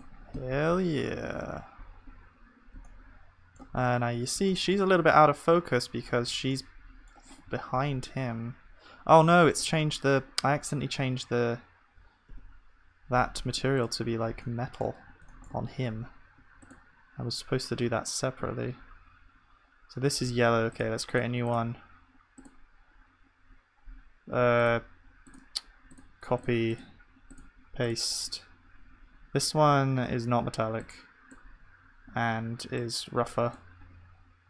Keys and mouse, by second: 0.0 KP_0, 1.2 ctrl+s, 12.4 KP_0, 15.6-18.6 middle drag, 16.6-18.6 drag, 24.6-30.5 drag.